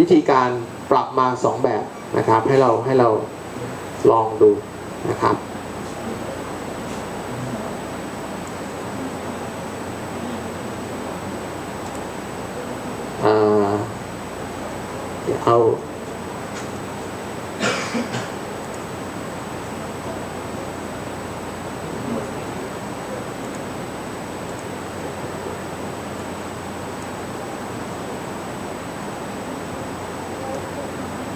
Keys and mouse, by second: 5.2 click, 5.4 click, 5.6 click, 5.8 click, 6.2 click, 12.4-14.6 right drag, 18.8 shift+a, 24.0-28.9 drag.